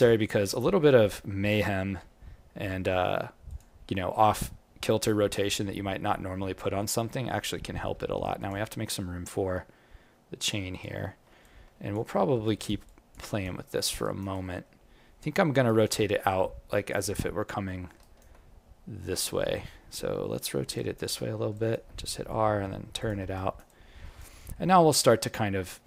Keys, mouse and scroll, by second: 0.4 alt+click, 1.9 r, 11.4 alt+click, 12.1 alt+middle click, 12.4 alt+right click, 12.8 alt+click, 13.2 alt+right click, 13.6 alt+middle click, 14.0 alt+right click, 14.3 alt+click, 15.3 alt+middle click, 15.6 alt+right click, 17.8 alt+middle click, 18.0 alt+right click, 19.8 scroll down 1, 19.8 scroll up 3, 20.6 scroll up 7, 20.7 alt+click, 21.1 alt+middle click, 21.5 alt+click, 22.1 r, 23.3 alt+right click, 23.6 alt+click, 24.3 alt+middle click, 24.7 alt+right click, 25.0 alt+click.